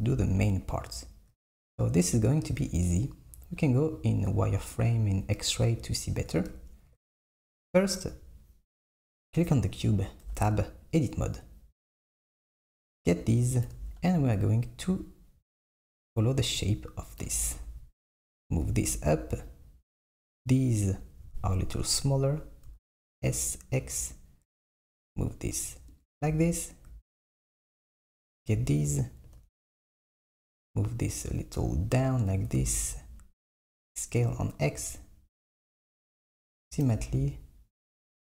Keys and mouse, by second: 0.2 KP_1, 4.1-5.0 drag, 9.4 click, 10.3 Tab, 12.3 click, 13.8 g, 17.4 g, 20.2 click, 22.8 s, 27.8 click, 29.3 g, 32.6 s, 36.9 g.